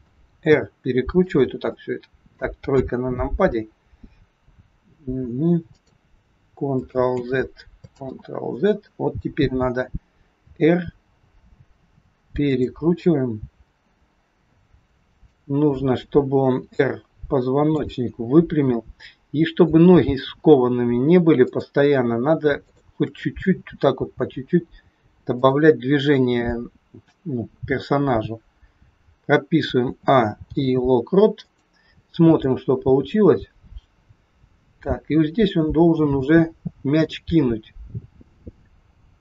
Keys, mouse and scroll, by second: 0.4 r, 1.7 middle click, 2.7 KP_3, 3.2 scroll down 2, 4.7-5.8 scroll down 1, 4.7 r, 7.0 ctrl+z, 7.9 ctrl+z, 10.3 r, 12.9 scroll down 3, 13.5-14.8 scroll up 1, 15.0 shift+click, 16.5 r, 18.8 scroll up 2, 21.4 shift+click, 22.9 shift+click, 23.9 g, 29.8 a, 30.3 i, 32.4 click.